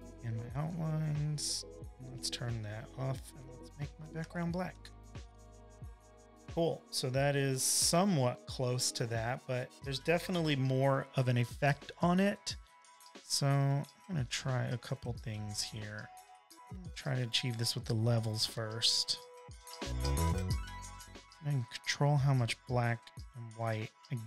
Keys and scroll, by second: 4.5 v, 4.6 space, 5.1 space, 6.6 super+i, 7.6 super+-, 8.3-9.4 typing, 11.5 super+=, 11.8 super+=, 12.2 v, 13.7 space, 13.8 space, 13.9 space, 16.1 super+j, 18.4 space, 18.9 space, 19.0 space, 19.6 super+l.